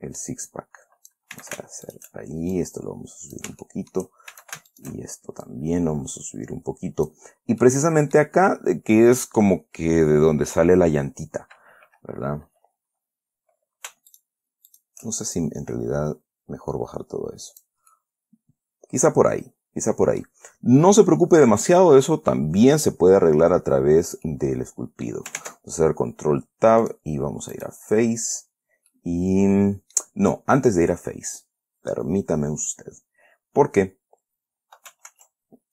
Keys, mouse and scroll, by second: 0.5-1.6 drag, 1.7 a, 2.2 alt+shift+click, 2.9-3.9 alt+drag, 4.0 shift+click, 4.7 shift+a, 5.1 alt+shift+click, 5.8-7.6 drag, 7.6 scroll down 2, 8.0 middle click, 14.5 alt+shift+click, 15.0 alt+shift+click, 15.7-18.2 alt+shift+drag, 18.3-20.8 middle drag, 21.1 scroll up 1, 21.5 scroll down 1, 23.6 scroll up 1, 24.0 scroll down 1, 24.6-25.6 middle drag, 25.7 ctrl+Tab, 27.2 click, 27.9 click, 29.3-30.5 middle drag, 30.7 scroll up 1, 35.4 ctrl+r.